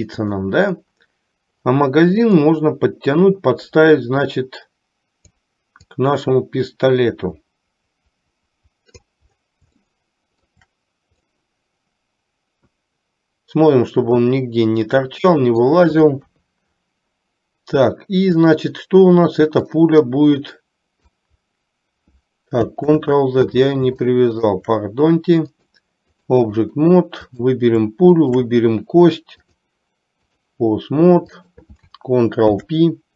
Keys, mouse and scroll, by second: 0.4 click, 2.5-5.6 drag, 6.0-9.3 drag, 10.0-10.6 shift+middle drag, 11.4-15.9 middle drag, 16.3 KP_3, 19.8-21.4 drag, 23.0 ctrl+z, 24.1-24.8 shift+middle drag, 25.8 click, 28.3 shift+click, 29.6-30.5 drag, 31.5 click, 32.5 ctrl+p.